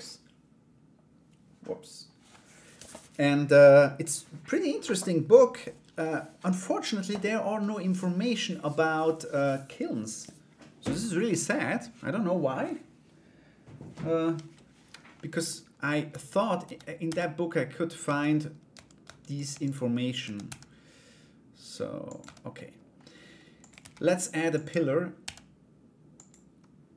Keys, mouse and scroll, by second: 14.7 middle click, 15.7 Tab, 16.2 a, 16.6 s, 18.3 Tab, 18.6 Tab, 18.9 right click, 19.2 alt+right click, 19.8 a, 20.0 s, 21.8 Tab, 22.1 middle click, 23.1 click, 23.4 shift+a, 24.8 s.